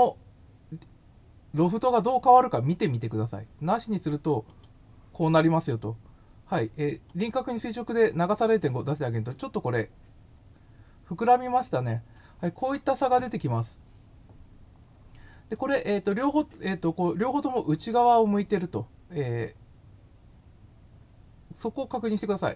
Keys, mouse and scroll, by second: 4.4 click, 5.7 click, 7.0 click, 22.4 click.